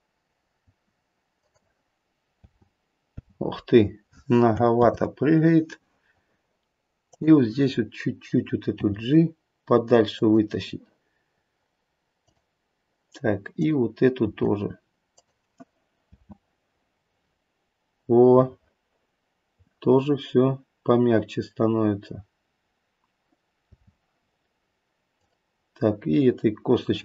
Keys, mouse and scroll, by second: 2.3 space, 3.2 space, 4.7 ctrl+z, 7.0 click, 8.8 g, 12.2 click, 13.5 click, 14.1 g, 16.0 space, 23.7 space, 25.1 click.